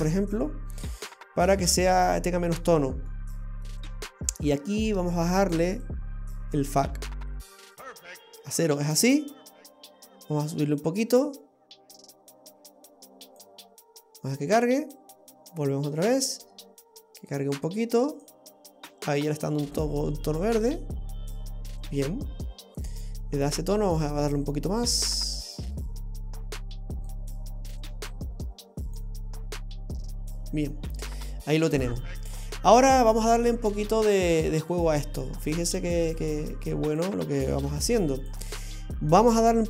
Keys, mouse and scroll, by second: 1.3-2.3 scroll down 4, 2.3 scroll down 2, 3.1 middle click, 3.9-4.8 scroll up 10, 5.8 click, 14.9 click, 17.3 click, 19.8 click, 21.9-23.0 scroll down 10, 23.5-24.5 scroll up 3, 24.5 click, 27.1 click, 28.1 click, 30.8-31.4 scroll down 5, 33.5 click, 34.7 click, 36.2 click, 37.7 click, 39.4 click.